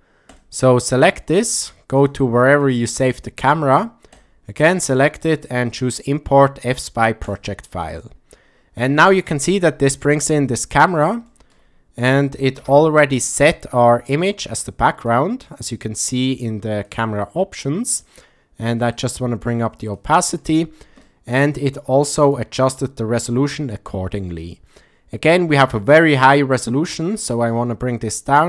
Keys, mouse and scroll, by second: 10.4-10.8 middle drag, 11.3 shift+middle drag, 12.7 KP_0, 15.1 click, 16.9 click, 19.0-20.0 drag, 21.1 shift+middle click, 22.3 click, 27.4-28.4 drag.